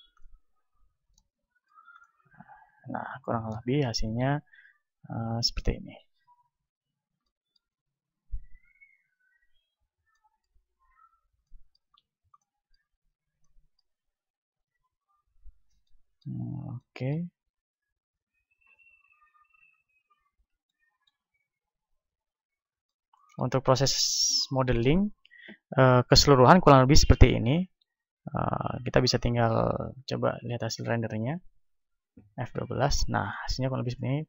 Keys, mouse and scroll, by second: 0.7-6.4 middle drag, 4.8 Tab, 5.4 Tab, 5.8 Tab, 6.4 Tab, 6.7 click, 6.7 right click, 7.1-8.4 middle drag, 7.8 a, 8.4 right click, 9.4 KP_1, 10.4-19.6 middle drag, 10.8 a, 19.6 t, 19.9-31.5 middle drag, 31.8 F12.